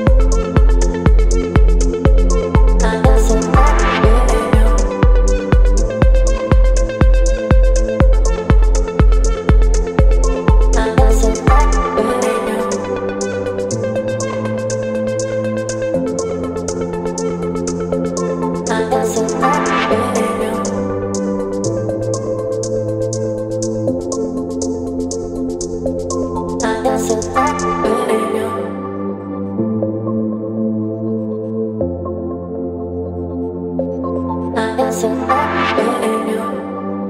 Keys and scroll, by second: 0.2 space, 5.1 KP_0.